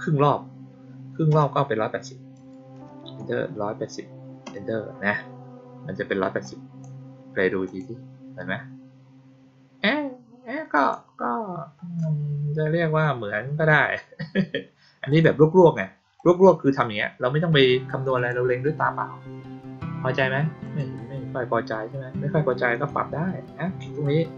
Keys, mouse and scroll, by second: 6.3-6.7 drag, 7.6 click, 10.7 click, 15.0 click, 16.1-16.7 drag, 18.1 click, 20.6 click, 22.6 click.